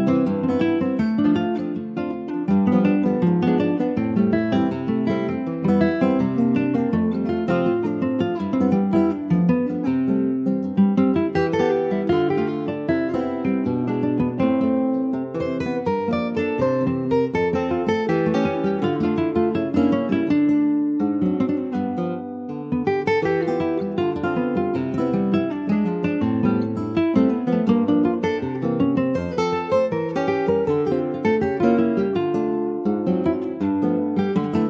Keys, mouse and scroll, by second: 0.2 scroll down 2, 0.4-3.0 middle drag, 3.0 Tab, 3.2 click, 3.6-5.4 middle drag, 5.4 ctrl+z, 5.7-8.4 ctrl+z, 9.9 middle click, 10.1 ctrl+scroll up 1, 10.2 ctrl+z, 10.4 ctrl+z, 11.6 Tab, 11.9 click, 12.4 ctrl+s, 12.5 click, 13.1-14.3 middle drag, 14.3 click, 14.5-16.7 right drag, 16.7 ctrl+s, 16.9 middle click, 17.2-17.5 scroll up 2, 17.5 shift+middle click, 18.3-19.4 middle drag, 19.4-20.6 drag, 20.6 ctrl+z, 21.6 /, 22.2 middle click, 22.7 Tab, 23.0 click, 23.8 3, 24.0 click, 24.3 middle click, 25.0 click, 26.3 2, 26.4 click, 27.5 click, 28.5 ctrl+b, 32.7 middle click, 33.4 Tab, 33.7 middle click, 34.4 click, 34.5-34.6 right drag.